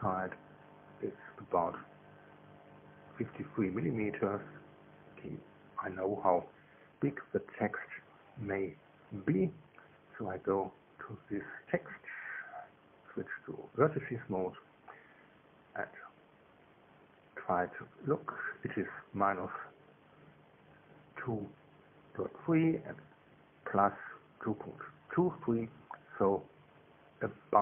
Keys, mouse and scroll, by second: 0.6 click, 6.0 alt+click, 6.5 alt+Tab, 9.9 Tab, 10.3 Tab, 10.8 right click, 13.7 click, 14.9 right click, 15.8 n, 21.7 right click.